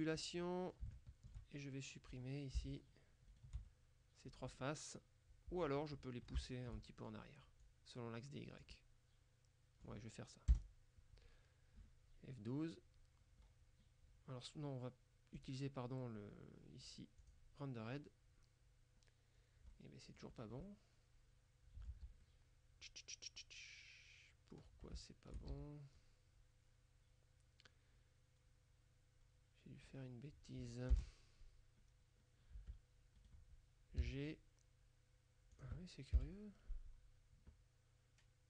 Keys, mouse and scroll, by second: 0.3-1.3 middle drag, 2.2 right click, 3.4 right click, 3.8 click, 5.9-7.2 middle drag, 7.7-8.8 drag, 8.8 middle click, 10.6 KP_0, 13.5-14.0 scroll up 2, 15.4 click, 17.3 click, 18.1-18.4 scroll up 2, 19.0-19.5 scroll up 2, 19.5 scroll down 1, 19.8 middle click, 19.8 click, 20.4 scroll down 2, 20.7 click, 22.0 z, 22.3 click, 25.0 shift+middle click, 25.6 shift+z, 26.0-30.4 shift+middle drag, 31.0 KP_0, 32.0-32.5 scroll down 2, 32.6 Tab, 33.3 right click, 34.1 g, 34.2 middle click, 35.6 click, 36.2 F12.